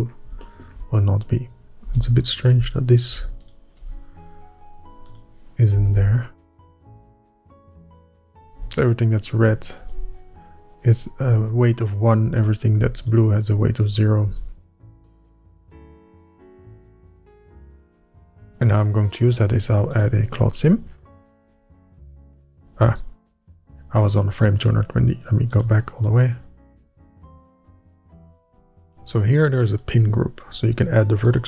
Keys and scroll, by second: 2.6 Tab, 6.5 Tab, 10.5 Tab, 15.0 Tab.